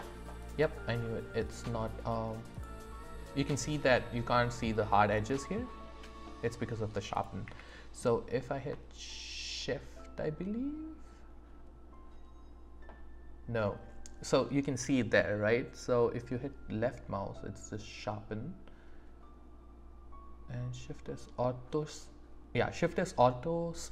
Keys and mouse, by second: 1.0 click, 1.0 right click, 2.6 click, 5.0 click, 5.0 right click, 6.2-6.7 drag, 6.2-6.7 right drag, 7.2 click, 7.4 q.